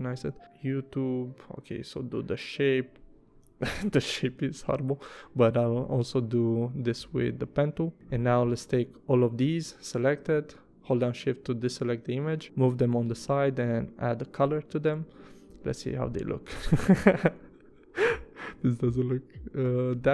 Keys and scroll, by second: 4.1 p, 7.9 v, 13.2 i, 14.4 v, 17.4 i, 18.1 v, 19.6 i.